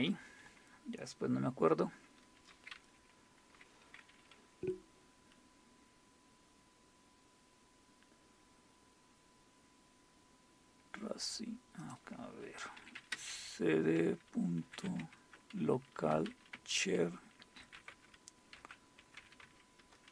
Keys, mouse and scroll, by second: 0.0 super+Return, 3.0 super+e, 5.6-6.5 scroll down 1, 6.7-7.3 scroll down 2, 7.3-9.7 scroll up 1, 9.7 scroll up 1, 11.8 click, 12.5-19.7 typing, 19.8 Return.